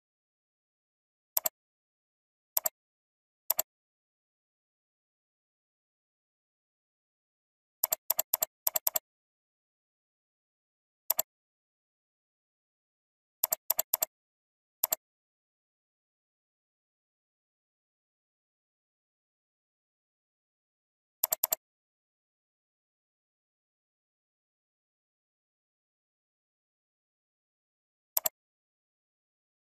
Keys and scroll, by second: 29.6 ctrl+t.